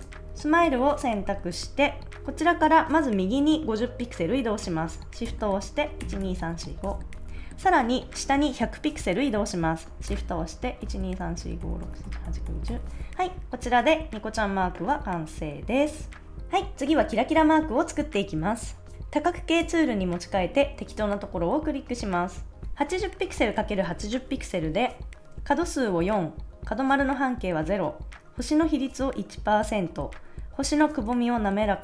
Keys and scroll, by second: 5.9 shift+Right, 6.9 shift+Right, 10.8 shift+Down, 11.4 shift+Down, 12.0 shift+Down, 12.6 shift+Down.